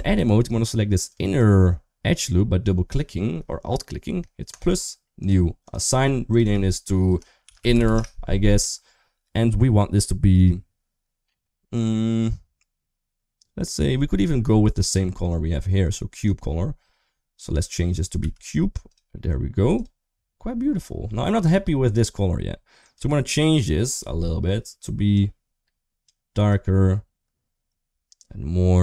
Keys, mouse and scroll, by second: 0.1 3, 0.8 click, 1.0 click, 4.3 click, 4.9 click, 6.1 click, 6.2-7.7 drag, 7.5 n, 8.4 Tab, 16.0 click, 19.5 click, 22.6 click.